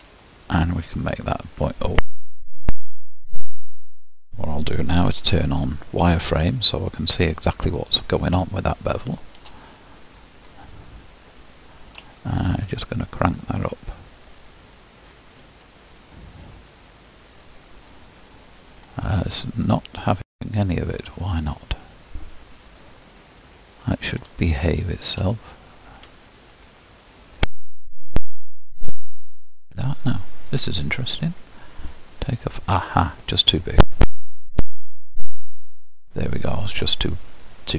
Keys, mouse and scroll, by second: 3.3-5.3 drag, 5.3 alt+v, 7.9-8.6 scroll up 2, 8.6-10.0 shift+middle drag, 10.0-12.9 scroll up 4, 13.0-15.4 shift+drag, 19.0 click, 22.5-23.1 scroll down 2, 23.1-28.7 middle drag, 28.7-32.0 drag, 35.0 0.